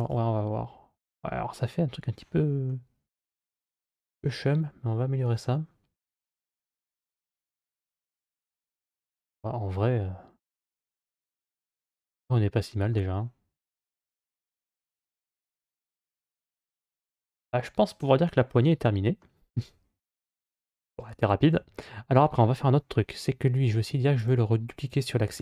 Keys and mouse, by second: 2.6-5.0 middle drag, 6.6 click, 7.8-12.8 middle drag, 15.0-19.0 middle drag, 21.3 a, 24.0 click.